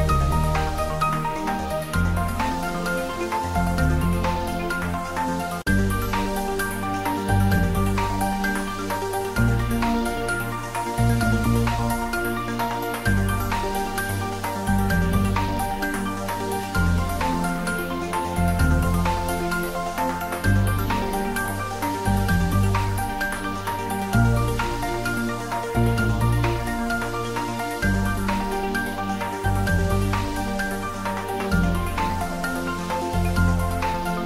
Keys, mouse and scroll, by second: 0.1 2, 0.5 shift+click, 1.3 g, 3.2 click, 3.3 Tab, 3.6 ctrl+middle click, 4.1 middle click, 4.9 click, 5.5-6.8 middle drag, 7.6 click, 7.9 shift+middle click, 8.7 ctrl+middle click, 9.8 g, 10.1 x, 10.4 Right, 13.0 Return, 13.5 shift+middle click, 14.0 ctrl+s, 14.3 ctrl+middle click, 15.0 middle click, 15.7 ctrl+middle click, 16.3-17.6 middle drag, 17.6 shift+click, 20.4-21.4 typing, 21.7 click, 21.8 Tab, 22.1 ctrl+s, 22.3 middle click, 22.9 Tab, 23.1 middle click, 24.1 middle click, 25.3 shift+click, 25.8 ctrl+middle click, 26.4 middle click, 26.9 g, 27.2 z, 27.9 click, 28.6 alt+h, 30.0-31.3 middle drag, 31.3 click, 31.9 ctrl+s, 32.3 click, 33.9-34.2 shift+middle drag.